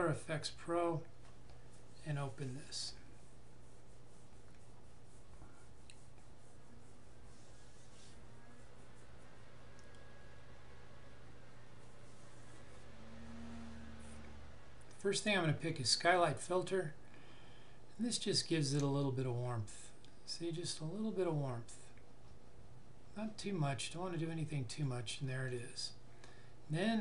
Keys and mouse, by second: 16.1 click, 18.9 click.